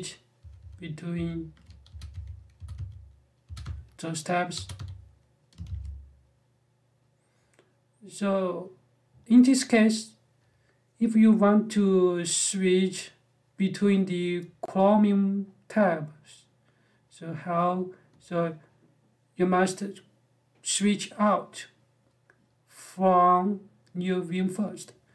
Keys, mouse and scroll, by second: 0.0-5.4 typing.